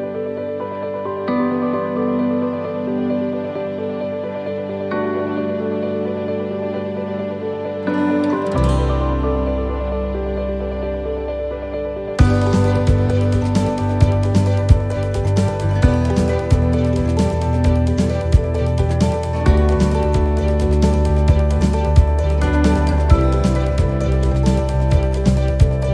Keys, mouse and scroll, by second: 4.2 ctrl+r, 4.2 s, 5.7 middle click, 8.1 middle click, 9.2 ctrl+r, 10.7 s, 11.8 middle click, 13.7 l, 14.7 click, 17.9 click, 17.9 shift+middle click, 18.5 middle click, 19.1-19.6 scroll down 4, 19.6 shift+middle click, 20.2 shift+middle click, 20.7-21.5 scroll up 10, 23.6-24.4 scroll down 10, 24.4 shift+middle click, 25.2 middle click, 25.6 shift+middle click.